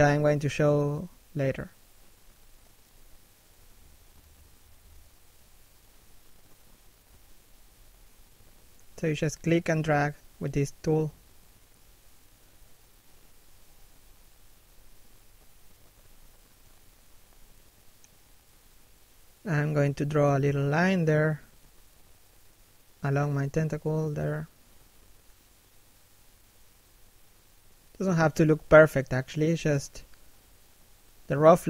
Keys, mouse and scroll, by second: 2.0 scroll down 1, 2.1 middle click, 2.6 shift+middle click, 3.0 middle click, 4.3 shift+middle click, 4.6 middle click, 6.9 middle click, 7.6 shift+middle click, 10.1 f, 10.7 right click, 11.0 f, 12.0 click, 12.6 shift+click, 16.2 shift+click, 17.9 middle click, 18.8 shift+click, 20.4 middle click, 22.1 shift+middle click, 22.9 shift+click, 24.4 middle click, 24.8 shift+middle click, 25.0-25.8 scroll up 1, 26.1 shift+middle click, 26.5-26.9 scroll down 1, 27.3 f, 27.6 click, 27.9 shift+click, 30.5 shift+middle click, 31.0 f, 31.3 click.